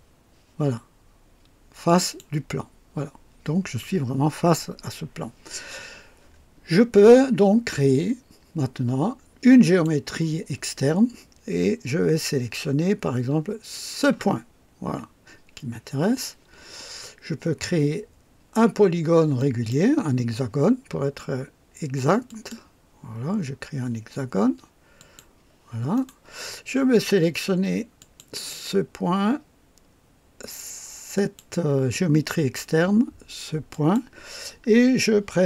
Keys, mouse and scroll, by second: 1.9 click, 9.6 click, 13.7 click, 19.4 click, 22.3 click, 25.0 click, 26.0 right click, 28.0 click, 31.2 click, 33.7 click.